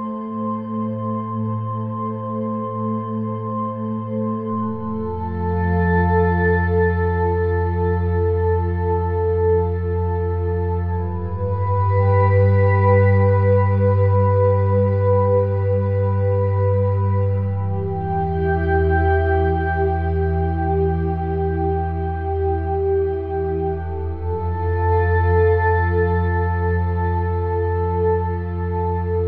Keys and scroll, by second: 6.8 [, 19.4-21.3 typing, 24.0 ], 25.3 -, 25.8 -, 27.0 ].